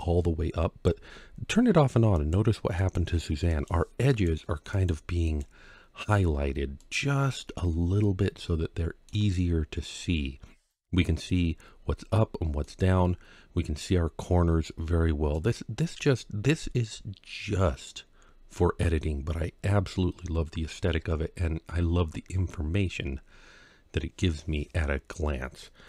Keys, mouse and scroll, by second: 5.9 scroll up 1, 6.6-8.9 middle drag, 9.2-9.7 scroll up 1, 9.8 scroll down 1, 12.4-15.2 middle drag, 15.9-18.3 middle drag, 18.8 scroll down 1, 20.8-21.6 scroll up 2, 21.6 scroll down 1, 21.7 scroll down 1.